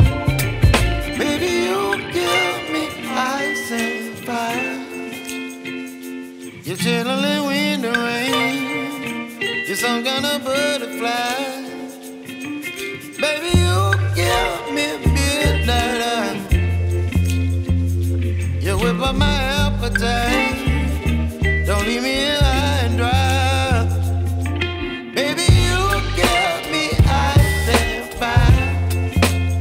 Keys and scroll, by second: 12.3 ctrl+r, 15.3 Escape, 25.1 ctrl+r, 26.4 F3, 29.1 F2.